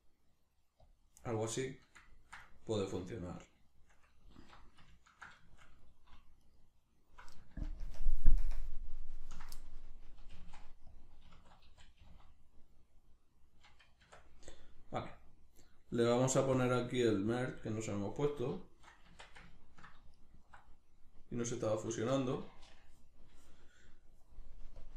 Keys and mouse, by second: 0.9 click, 1.3-6.4 middle drag, 4.3 alt+q, 6.4 alt+right click, 7.7 ctrl+KP_Add, 8.4 ctrl+KP_Subtract, 10.3 g, 11.0 click, 11.3 s, 11.9 click, 12.0 g, 12.9 click, 14.0 Tab, 14.5-16.5 middle drag, 16.5-18.6 drag, 18.6-20.1 shift+middle drag, 19.1 Tab, 20.1 alt+right click, 22.2 Tab, 24.8-24.9 drag.